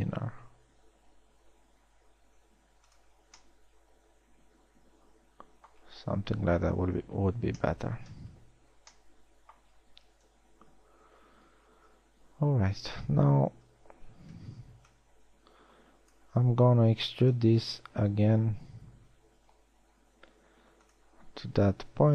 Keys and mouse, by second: 7.0 KP_1, 7.4 z, 10.8 KP_1, 11.4 z, 14.0 a, 14.8 z, 15.2 b, 18.8 e.